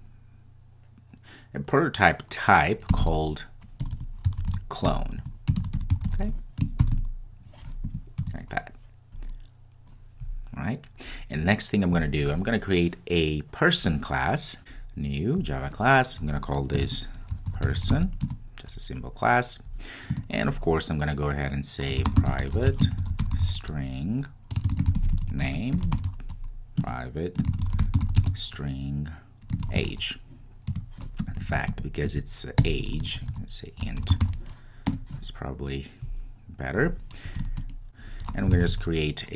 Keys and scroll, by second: 26.9 Return, 34.9 Return, 35.1 Return, 38.6 super+n.